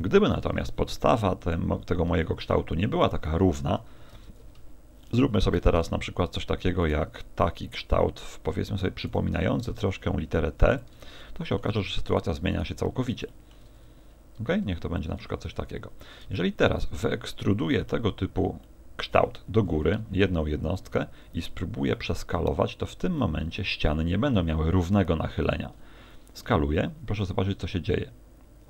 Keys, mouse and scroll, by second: 0.4 Tab, 1.1 x, 2.3 shift+a, 3.9 KP_7, 4.1 Tab, 5.1 shift+middle click, 5.7 ctrl+Tab, 6.8 right click, 7.4 e, 8.3 ctrl+click, 9.0 right click, 9.3 e, 10.8 ctrl+click, 11.2 shift+middle click, 12.1 right click, 12.5 right click, 12.8-13.1 scroll down 6, 13.3 shift+middle click, 13.8 e, 15.1 ctrl+click, 15.8 Tab, 16.3 Tab, 16.7 a, 16.9 a, 17.1 middle click, 17.9 middle click, 18.7 middle click, 19.7 e, 20.9 ctrl+click, 21.9 middle click, 23.2 middle click, 23.9 middle click, 26.5 s.